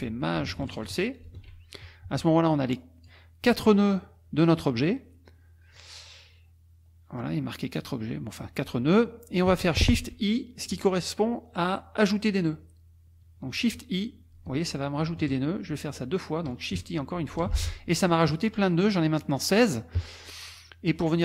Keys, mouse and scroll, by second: 1.2 ctrl+shift+c, 2.5 click, 14.3 shift+i, 17.2 shift+i, 20.1 click.